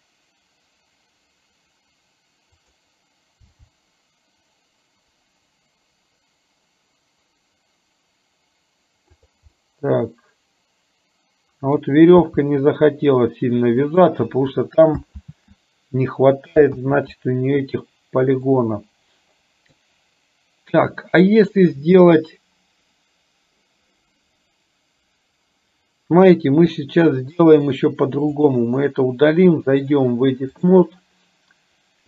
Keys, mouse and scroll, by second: 3.6 g, 9.6-11.9 middle drag, 12.4 g, 15.3 ctrl+z, 18.6-19.8 middle drag, 26.8 shift+middle click, 28.3 click, 29.9-30.9 drag.